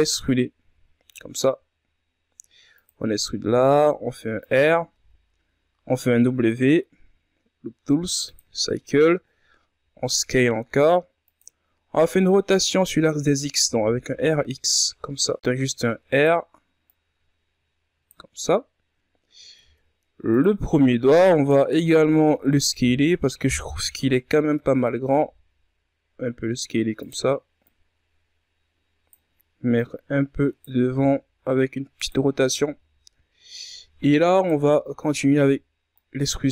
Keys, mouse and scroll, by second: 3.4 r, 9.7 s, 11.8-12.3 scroll down 3, 12.3 scroll up 4, 13.6 r, 16.1 r, 18.0-21.5 drag, 21.5 ctrl+Tab, 22.4-23.5 alt+right drag, 23.5 ctrl+KP_Add, 24.7 ctrl+KP_Subtract, 26.1 s, 28.7-32.0 drag, 32.0 r, 33.9 z, 34.2-34.5 scroll up 2, 34.5 ctrl+scroll down 4, 35.5 right click.